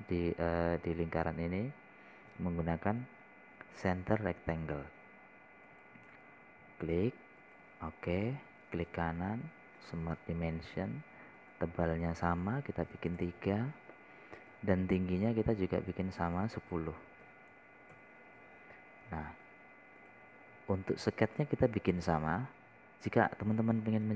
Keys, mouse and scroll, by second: 0.3-0.8 scroll up 1, 1.2 scroll down 1, 5.1 click, 5.8 scroll down 1, 7.1 click, 9.6 right click, 11.2 click, 11.8 scroll down 1, 12.8 click, 14.3 KP_3, 15.8 click, 16.2 scroll down 1, 17.2 click, 18.7 KP_1, 18.9 KP_0, 20.4 scroll down 1, 20.8 right click, 21.5 click, 21.9-22.3 scroll down 1, 23.5 click.